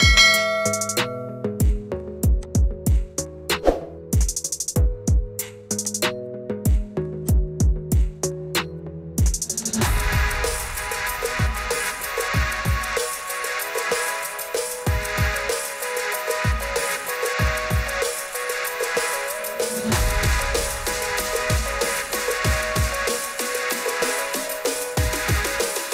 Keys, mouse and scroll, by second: 4.2 click, 6.0 click, 8.5 click, 9.6 click, 11.8 click, 13.0 click, 15.0 click, 15.8 click, 18.2 click, 19.0 click, 21.4 click, 23.3 click, 24.0 click.